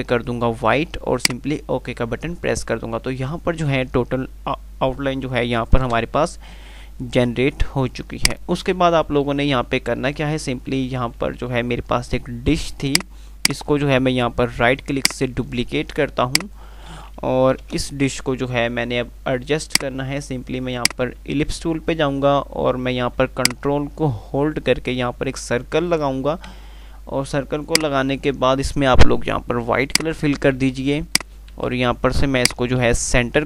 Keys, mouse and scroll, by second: 7.9 click, 8.5 F3, 11.7 F3, 12.9-15.5 drag, 15.3 right click, 15.7 F2, 16.2 click, 16.5 F2, 17.9 Page_Up, 19.9 click, 23.8-26.3 ctrl+drag, 31.3 click, 31.8 c, 32.7 click, 33.0-33.4 typing.